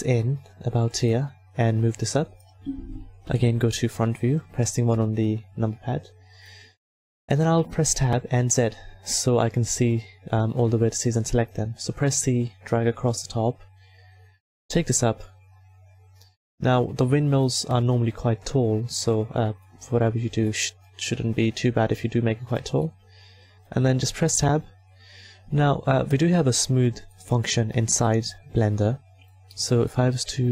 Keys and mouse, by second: 1.9-3.3 drag, 3.2 KP_1, 6.7 click, 7.4 Tab, 8.2 z, 8.6 a, 10.9 c, 13.9-21.1 drag, 21.1 s, 23.7 Tab, 24.7 a, 26.4-27.9 drag.